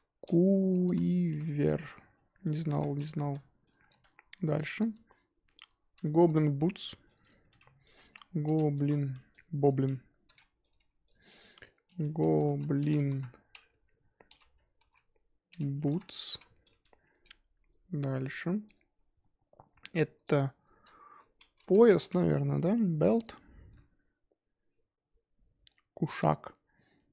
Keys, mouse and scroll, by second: 4.6 click, 5.1-5.7 shift+middle drag, 5.7-6.0 scroll up 2, 6.0-7.1 shift+middle drag, 7.2-10.7 drag, 10.8 F2, 16.7 o, 18.7 click, 19.4 scroll up 2.